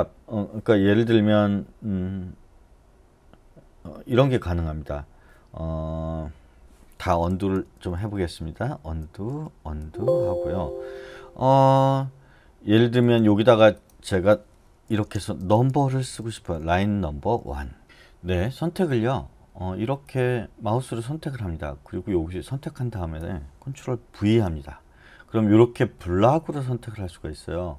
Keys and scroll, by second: 7.3 u, 7.5 u, 8.0 u, 8.3 u, 9.3 u, 9.8 u, 14.6-17.0 typing, 24.2 ctrl+v.